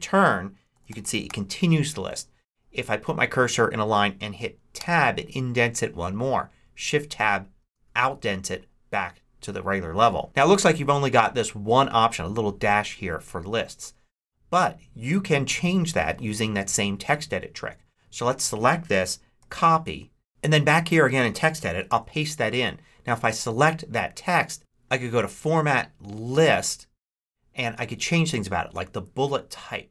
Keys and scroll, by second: 0.4-1.7 typing, 4.7 Tab, 7.5 shift+Tab, 19.3 super+c, 21.8 super+v.